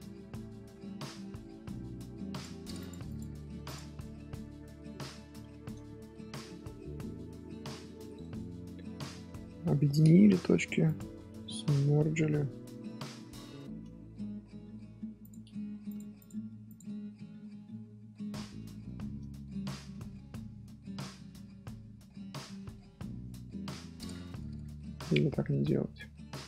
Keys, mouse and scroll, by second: 0.8-2.3 middle drag, 2.3 click, 3.0 click, 3.7 scroll up 1, 3.9 scroll down 1, 4.0-4.5 middle drag, 4.5 scroll down 3, 4.8-6.6 middle drag, 6.6 scroll down 1, 6.7-8.1 shift+middle drag, 8.1-8.5 scroll up 2, 8.5-9.6 middle drag, 9.6 a, 11.5-15.2 middle drag, 13.9-14.6 scroll up 1, 14.6-15.2 scroll up 1, 15.2 click, 16.1 click, 16.9 scroll down 1, 17.5 middle click, 17.9 scroll up 1, 18.0 scroll down 1, 18.1-23.4 shift+middle drag, 19.0-19.3 scroll down 1, 23.2 scroll down 1, 23.4 scroll up 1, 23.6 scroll down 1, 23.6 scroll up 1, 23.7 middle click, 23.9 scroll down 1, 24.1-25.6 shift+middle drag, 25.6 ctrl+z, 25.8 ctrl+z.